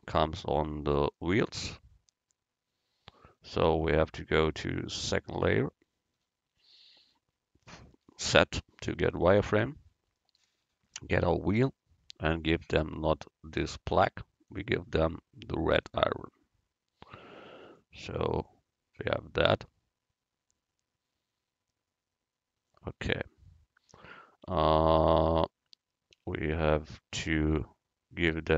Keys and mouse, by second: 1.1-3.4 right drag, 3.5-5.2 middle drag, 5.2-7.1 drag, 9.5 z, 10.9 click, 14.5-16.5 drag, 17.7-19.5 drag, 24.6 Tab, 26.2 u, 27.5 Tab.